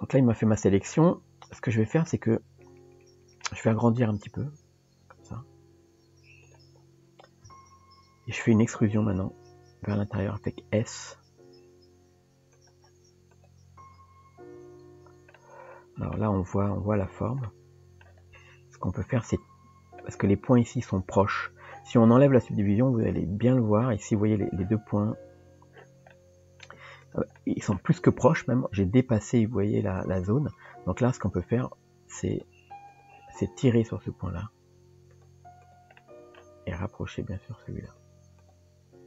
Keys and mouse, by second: 0.9 middle click, 2.1-3.4 middle drag, 9.1 e, 13.4 click, 14.6 Tab, 15.4-16.2 middle drag, 17.5 middle click, 18.8 click, 23.0 click, 23.5 click, 26.1 middle click, 27.4 middle click, 30.6 click, 33.0 click, 35.6 click, 36.0 middle click.